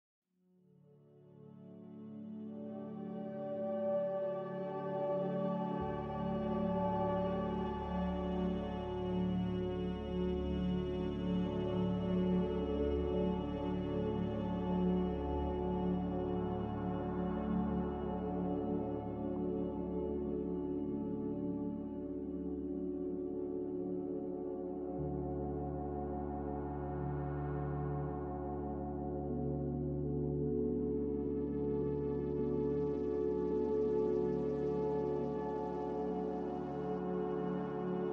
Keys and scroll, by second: 0.7-1.5 typing, 4.0 Delete, 5.0-5.8 typing, 10.1 7, 11.7-13.1 typing, 27.3 a, 28.8 z, 37.5 Delete.